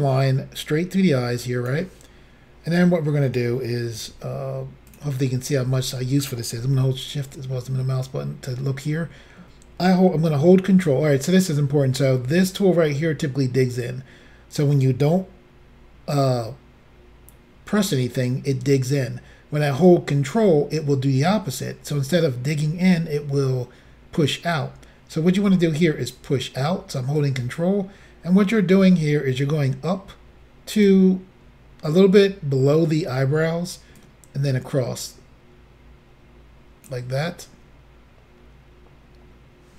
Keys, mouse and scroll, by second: 4.0 f, 4.9 click, 6.9 shift+middle click, 27.2 ctrl+click, 34.0 ctrl+click.